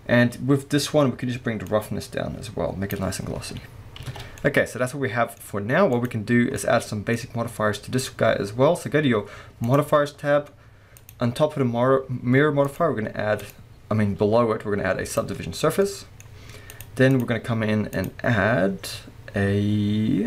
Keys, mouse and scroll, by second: 0.5-1.6 scroll down 1, 1.6-4.4 drag, 3.2 scroll down 1, 4.1 alt+a, 4.4-5.4 middle drag, 5.4-5.8 scroll up 1, 5.9 click, 6.6 middle click, 9.7 click, 10.9 click, 12.7 click, 13.4-15.8 drag, 15.8 middle click, 16.7 click, 17.1 click, 18.0-20.2 drag.